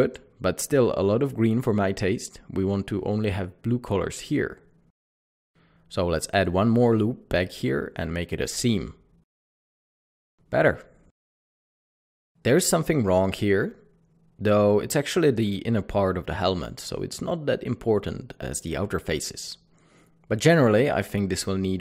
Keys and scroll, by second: 6.1 ctrl+r, 6.4 Escape, 7.5-8.1 typing, 13.4 typing, 17.1 Delete.